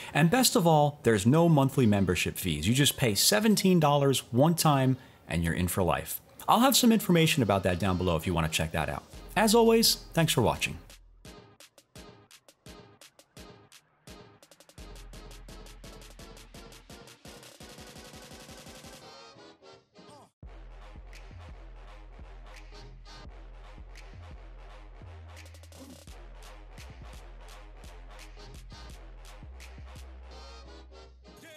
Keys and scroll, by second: 11.5 Down.